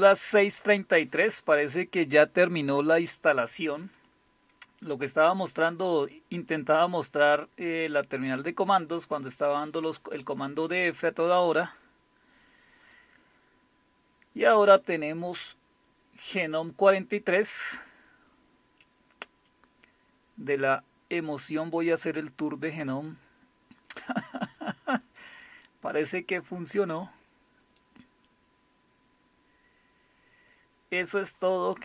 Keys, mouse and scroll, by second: 12.8 click, 20.6 click, 22.3 click, 23.9 click, 25.0 click, 26.0 click, 27.6 click.